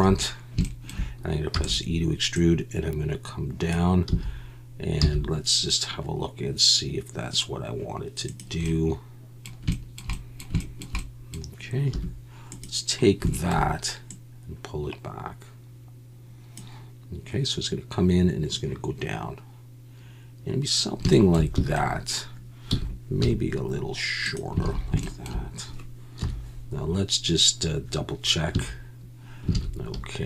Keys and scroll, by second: 4.1 z, 5.0 z, 11.9 1, 21.6 a, 22.7 s, 23.2 y, 24.6 alt+a, 26.2 KP_1, 28.5 a, 29.5 alt+a.